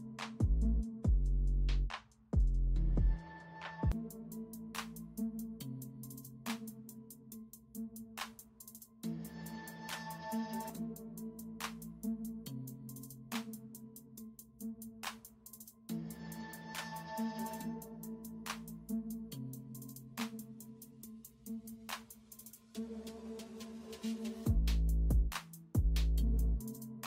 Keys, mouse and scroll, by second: 1.4 alt+click, 2.1 alt+click, 2.8 alt+click, 2.9 space, 3.5 alt+click, 4.1 alt+click, 4.2 space, 4.8 alt+click, 5.3 alt+click, 6.1 alt+click, 6.3 alt+click, 6.9 alt+click, 7.9 alt+scroll down 1, 8.7 alt+scroll down 1, 9.7-10.5 alt+scroll up 1, 11.1 ctrl+z, 11.2 alt+scroll up 1, 12.7 space, 13.7 alt+scroll up 1, 14.1 alt+click, 16.0 alt+scroll up 1, 16.6 ctrl+z, 17.4 alt+click, 18.6 space, 18.8 alt+scroll up 1, 19.8 alt+click, 20.0 space, 20.8 alt+click, 22.9 alt+click, 23.4 alt+click, 24.0 alt+click, 24.3 alt+click, 25.1 alt+click, 25.8 alt+click, 26.7 ctrl+z.